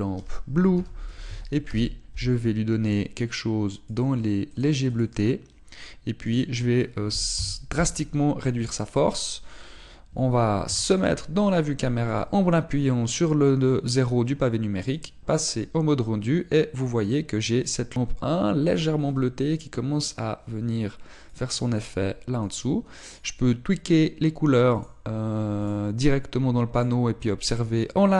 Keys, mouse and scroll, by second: 4.8 click, 8.3 click, 11.6 KP_0, 13.0 click, 23.4 click.